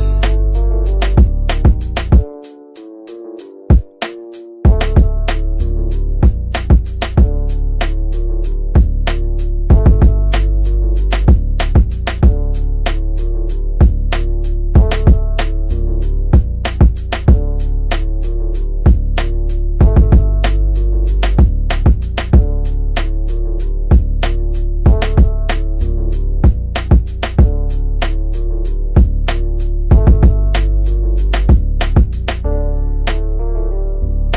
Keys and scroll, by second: 13.7 g, 23.3 g.